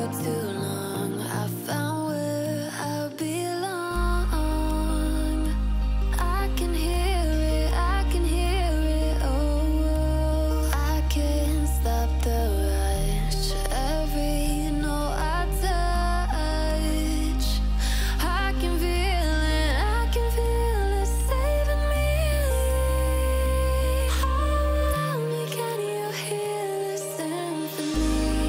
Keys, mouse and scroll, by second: 6.6-7.9 alt+scroll down 1, 9.5-9.8 alt+scroll up 1, 9.8 click, 10.5-10.9 alt+scroll up 1, 11.2 click, 12.9-13.5 drag, 15.8 ctrl+z, 19.5-20.0 alt+scroll down 1, 20.3 alt+scroll up 1, 20.9 ctrl+z, 22.0 ctrl+shift+z, 25.7 click, 26.3-26.6 alt+scroll up 1, 26.8-27.6 drag.